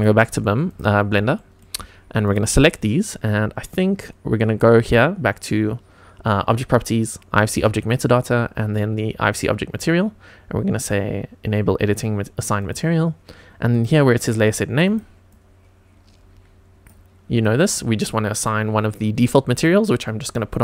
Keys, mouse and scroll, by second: 0.6 click, 1.3 shift+middle drag, 2.2 click, 12.6 click, 13.7-14.8 drag, 15.3-16.9 drag, 17.3-20.4 drag.